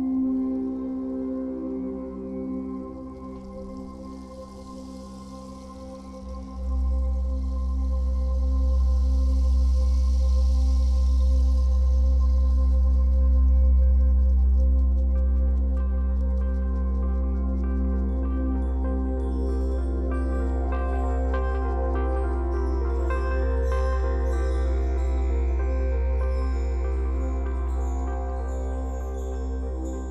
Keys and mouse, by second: 0.3 click, 1.0 shift+click, 3.0 alt+shift+click, 3.6 Return, 3.9 ctrl+-, 4.6 =, 5.6 click, 11.9 Return, 12.8 click, 19.3 click, 23.7-24.5 typing, 25.5 z, 26.7 click, 27.9 Return, 28.5 z.